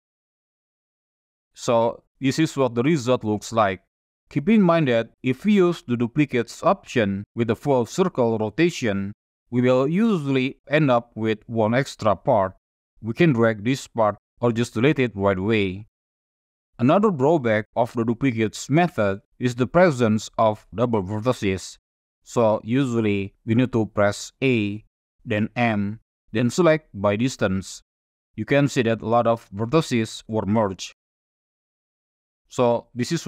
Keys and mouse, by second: 1.8-3.0 middle drag, 4.0 middle click, 12.1 click, 13.6 click, 15.2 x, 16.6 click, 16.8 middle click, 24.4 a, 25.5 m, 30.2 Tab, 30.8 drag, 31.0-32.2 middle drag.